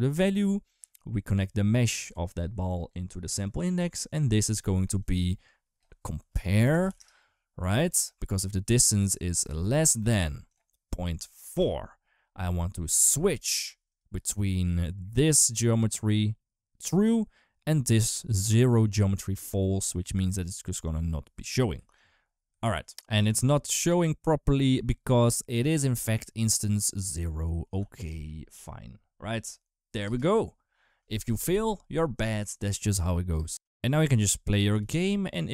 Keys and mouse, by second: 1.7-2.7 drag, 4.8 click, 5.0-7.8 drag, 8.7 click, 9.5 click, 10.4-11.4 drag, 12.3 click, 12.5-13.8 drag, 14.7 click, 14.9-16.6 drag, 19.9 click, 20.0 click, 20.7 click, 21.7 ctrl+right click, 22.7 ctrl+z, 26.9 click, 27.7 ctrl+s, 27.9 space, 29.8 space, 32.0 click, 33.2 space, 33.6 click, 33.8 space, 34.5 g.